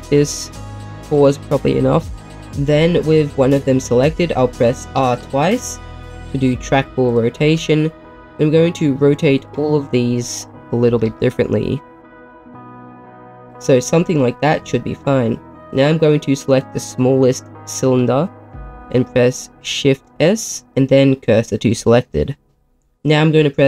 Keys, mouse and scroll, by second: 1.1 click, 4.9 r, 5.2 r, 6.4 click, 7.0 click, 7.4 r, 7.5 r, 9.4 click, 10.4 click, 10.9 r, 11.0 r, 12.2 click, 12.3 click, 12.4 r, 12.6 r, 13.5 click, 14.6 middle click, 16.6-19.4 drag, 20.1 shift+s, 22.3 middle click.